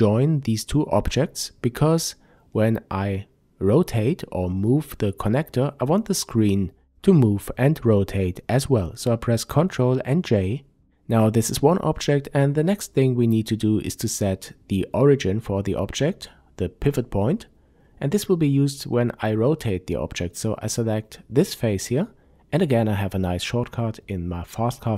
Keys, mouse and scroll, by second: 7.0 ctrl+j, 8.3 n, 10.0-11.0 scroll up 1, 11.4-11.7 scroll down 1, 12.1-15.7 middle drag, 14.0-14.5 scroll up 2, 15.0-15.7 scroll up 2, 15.7 click, 16.3 Tab, 17.2-18.5 scroll up 2, 18.5 click, 19.6 click, 20.2-21.2 scroll down 1, 21.2 n.